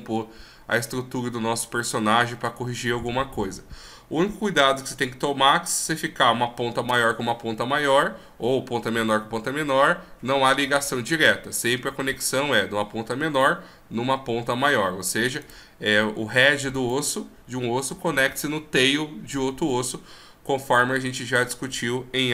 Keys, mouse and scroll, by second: 15.4 right click, 16.7 right click.